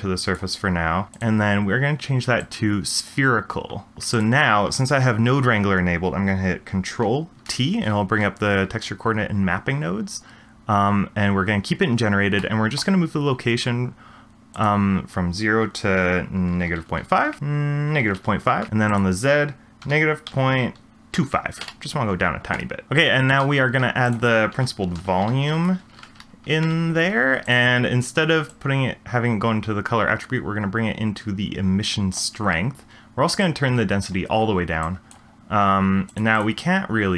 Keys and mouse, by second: 1.1-3.2 drag, 4.1 click, 7.4 ctrl+t, 12.4 shift+middle click, 14.5-17.1 drag, 17.4-18.4 drag, 18.9-21.6 drag, 23.0 click, 23.4 shift+a, 28.5 click, 28.9-32.2 drag, 33.4 click, 34.8 click, 35.6 g, 36.3 click.